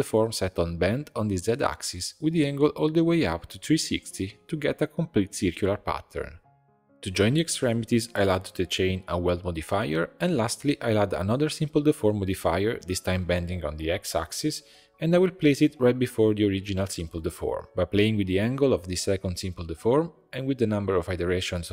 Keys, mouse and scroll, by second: 1.3 click, 2.0-3.5 drag, 3.7 scroll down 3, 3.9-5.4 middle drag, 5.7-7.1 ctrl+shift+middle drag, 7.1-8.6 drag, 9.2-10.3 middle drag, 10.3-12.4 drag, 12.9 click, 14.0 scroll up 1, 14.0-15.2 middle drag, 15.2-16.7 drag, 17.1 click, 17.9 scroll down 1, 18.6-21.7 drag.